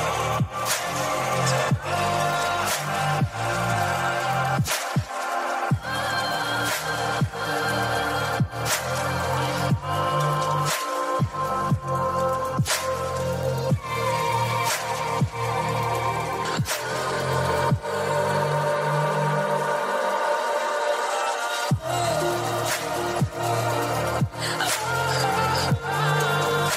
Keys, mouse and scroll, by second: 0.5-1.9 drag, 3.2 g, 5.6 click, 6.6 click, 8.9 g, 10.9 click, 11.4 click, 13.1 g, 14.3 click, 15.1-16.4 drag, 17.3 g, 19.4 click, 22.6 ctrl+r.